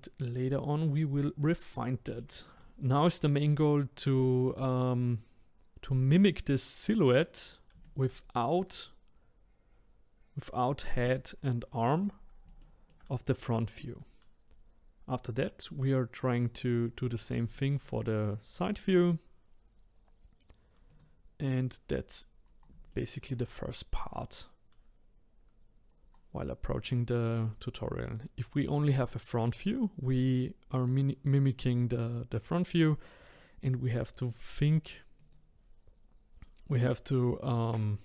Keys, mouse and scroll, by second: 2.2 shift+middle click, 3.0-4.2 scroll down 1, 4.2-5.8 shift+middle drag, 5.8-7.8 scroll up 1, 7.8 shift+middle click, 10.8 middle click, 12.6-15.6 shift+middle drag, 16.3 click, 17.1-17.5 scroll down 2, 17.5-20.6 shift+middle drag, 20.9 click, 21.9-22.4 scroll up 3, 22.4-22.9 scroll down 1, 22.9-25.8 shift+middle drag, 25.8-28.9 scroll down 2, 29.0-32.0 shift+middle drag, 33.3-35.2 middle drag, 35.2 click.